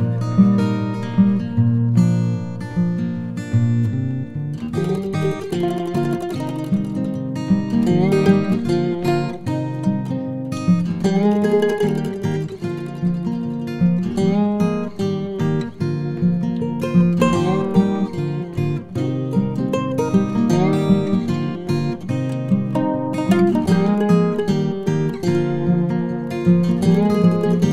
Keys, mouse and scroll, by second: 1.2 ctrl+a, 2.3 Tab, 3.0 3, 3.3 click, 4.8 shift+middle click, 7.2 i, 13.4 s, 18.9 Tab, 22.9 click, 23.3 shift+s, 25.3 Tab, 26.1 shift+a.